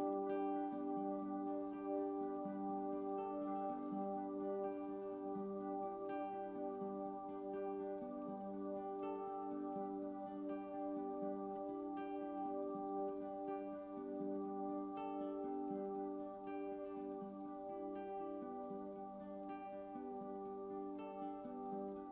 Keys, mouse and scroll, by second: 8.4-11.7 drag, 19.5-22.1 middle drag.